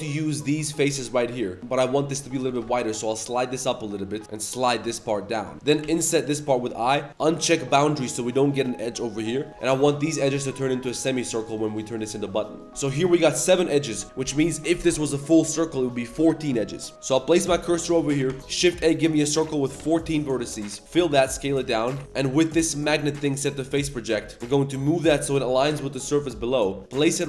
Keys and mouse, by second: 0.3 ctrl+shift+click, 2.4 g, 5.5 3, 5.8 i, 7.1 click, 9.5 2, 9.7 shift+drag, 10.1 shift+click, 10.4 shift+click, 11.0 shift+drag, 11.4 shift+click, 11.6 shift+drag, 11.8 shift+click, 12.4 middle click, 16.9 2, 17.0 2, 17.1 click, 17.4 shift+s, 18.2 click, 18.3 Tab, 18.4 shift+a, 19.4 click, 20.8 f, 20.9 s, 21.8 Tab, 22.6-23.8 drag, 24.2 z, 24.3 click, 24.4 g.